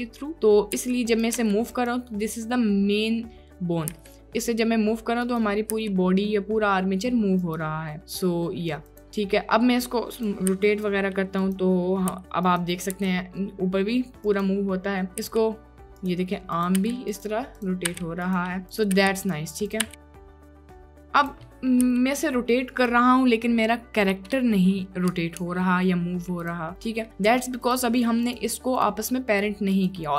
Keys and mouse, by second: 1.0 g, 1.4 g, 4.0 g, 5.3 click, 5.8 g, 8.0-8.4 drag, 8.5 click, 8.9 click, 10.2 drag, 10.6 r, 12.2 r, 13.0 r, 15.3 r, 16.6 click, 16.9 r, 17.6 click, 17.9 r, 18.3 click, 18.8 drag, 19.0 r, 19.2-19.9 drag, 19.9 r, 21.6 click, 21.9 g, 25.4 ctrl+Tab, 26.7 click, 29.8 drag.